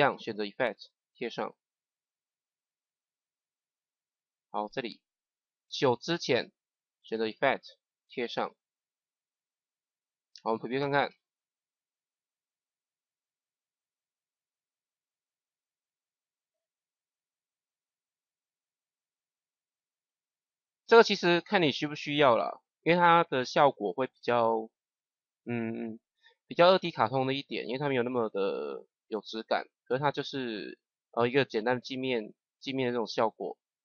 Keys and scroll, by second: 1.1 ctrl+v, 8.0 ctrl+v, 11.0 KP_0.